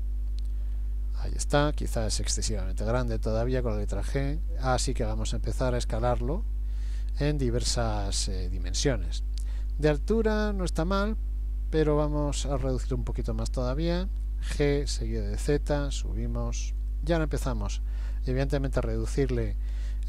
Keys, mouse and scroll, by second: 0.7-1.5 scroll up 1, 1.7-2.8 scroll up 5, 2.8 g, 5.4 middle click, 6.4-8.0 scroll down 3, 6.8 middle click, 8.1 shift+middle click, 8.7 middle click, 12.4 s, 14.5 g, 17.6 middle click.